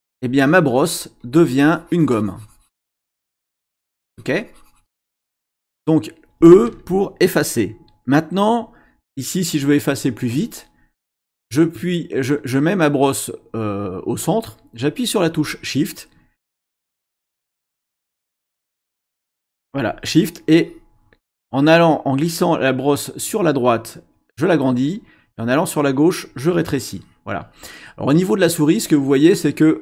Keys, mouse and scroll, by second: 1.2-3.7 drag, 4.0-5.4 drag, 9.5-10.8 drag, 12.7-17.8 drag, 18.8 shift+click.